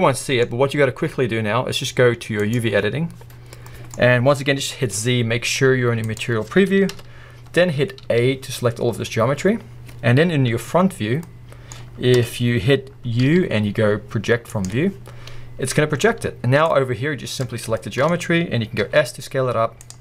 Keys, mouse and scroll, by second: 2.7 click, 3.6-8.6 middle drag, 4.0-6.2 scroll up 1, 6.2 z, 6.9 KP_1, 7.6-8.1 scroll up 1, 8.1 a, 8.9-9.9 scroll down 1, 9.9-11.2 scroll up 1, 11.2-11.8 middle drag, 12.2 KP_1, 14.6 u, 14.9-17.4 middle drag, 17.4 click, 18.8-19.9 middle drag, 18.8 s, 19.9-20.0 drag.